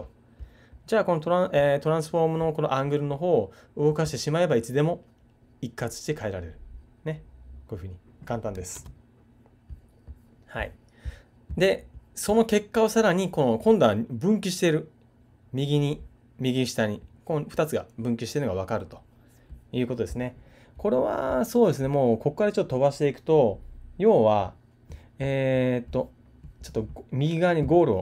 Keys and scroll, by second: 8.7 super+z.